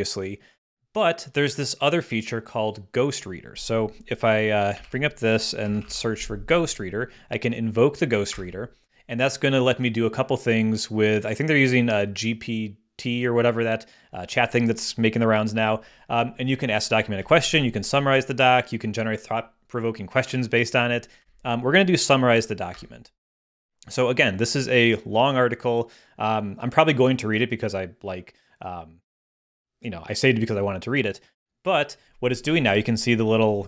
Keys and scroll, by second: 4.8 super+k, 5.4-6.4 typing, 8.3 Return, 17.2 Down, 21.2 Up, 22.7 Return.